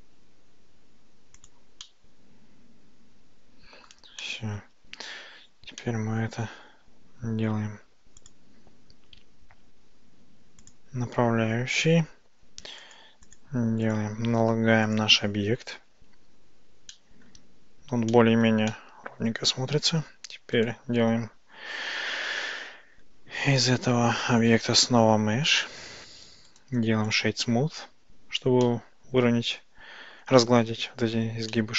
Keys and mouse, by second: 1.4 click, 1.9-3.9 middle drag, 4.3 middle click, 5.2 Tab, 5.9-6.3 middle drag, 8.3-10.8 drag, 13.0 click, 13.3 click, 14.0-15.1 drag, 17.0-17.3 shift+middle drag, 18.2-18.5 shift+middle drag, 18.7-19.9 middle drag, 23.7-25.7 drag, 28.7-30.3 middle drag, 31.6-31.7 middle drag.